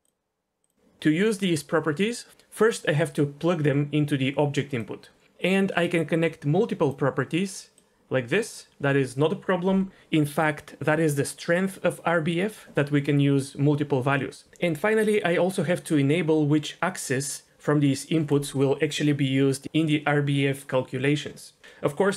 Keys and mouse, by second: 0.7 ctrl+z, 3.5 click, 3.8-4.8 drag, 5.9 click, 6.4-6.9 drag, 7.7 drag.